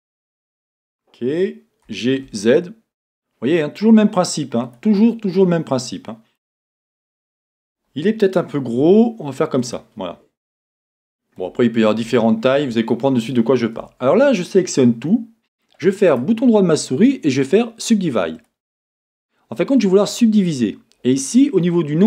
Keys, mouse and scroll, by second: 0.5-5.1 drag, 0.5 KP_1, 1.9 g, 5.3-7.2 middle drag, 7.6 scroll, 8.8-9.6 scroll up 1, 9.6-10.5 scroll up 1, 10.5-11.2 scroll up 1, 12.3 middle click, 12.5 shift+click, 12.9-13.3 scroll, 13.8-16.1 middle drag, 13.8 Tab, 16.1-18.4 right drag, 18.4-20.1 middle drag.